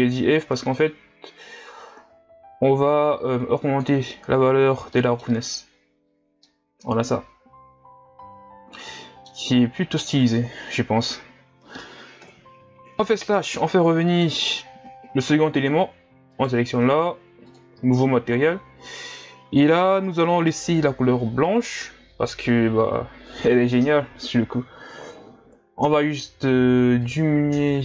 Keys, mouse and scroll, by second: 5.5-6.1 scroll up 1, 6.1-6.4 scroll down 2, 6.4-9.5 middle drag, 12.3 KP_Divide, 13.6-14.5 middle drag, 14.5-15.3 scroll up 1, 15.3-16.1 scroll down 2, 16.1 scroll down 1, 16.3-27.8 right drag.